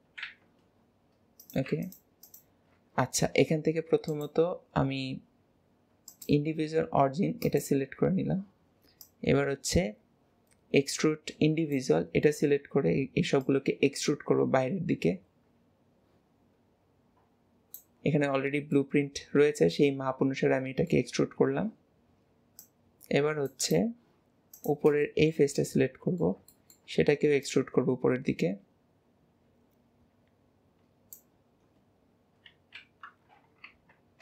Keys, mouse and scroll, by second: 1.5 click, 2.3 click, 4.2-7.7 drag, 9.1-12.2 drag, 13.5 click, 18.8-21.8 middle drag, 22.6-23.8 drag, 24.6 click, 25.1-27.5 middle drag, 27.5 click.